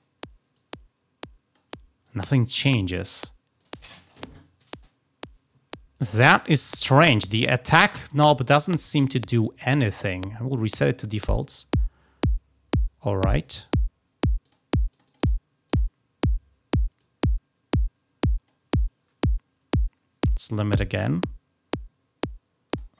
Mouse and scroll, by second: 0.5-1.5 drag, 1.9-2.4 drag, 3.5-4.0 drag, 5.7-6.5 drag, 7.0-7.4 drag, 8.1-9.7 drag, 11.1 click, 14.3 click, 14.8 click, 15.0 click, 15.1 click, 16.9-18.4 drag, 20.2-22.7 drag.